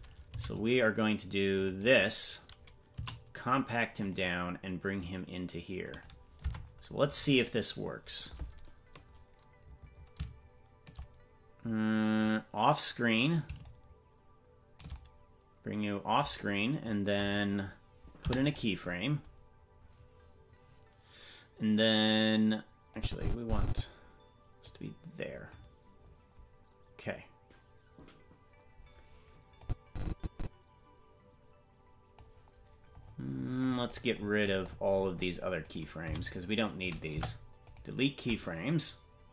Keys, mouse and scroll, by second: 0.3 c, 2.9 s, 4.9-6.0 drag, 6.4 Tab, 7.3-9.1 scroll down 6, 11.4-11.8 scroll down 1, 12.2 click, 13.6-14.8 shift+drag, 16.8 click, 18.2 i, 22.9 click, 24.6 click, 29.6-32.2 drag, 33.0-34.0 scroll down 10, 34.0-35.6 scroll down 43, 35.6 right click, 36.0 c, 37.1 Delete.